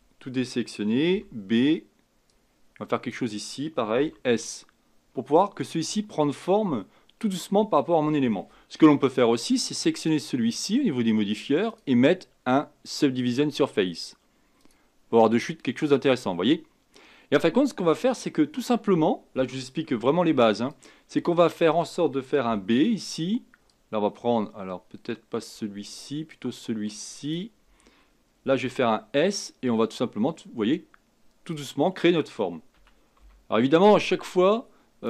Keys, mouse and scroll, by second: 1.1 b, 4.0 s, 8.8 Tab, 9.9 click, 11.7 click, 13.3-16.3 drag, 18.0 Tab, 19.9 Tab, 20.7 click, 21.1 Tab, 22.4 b, 26.3-28.6 drag, 28.6 s, 32.7 a, 33.2 b.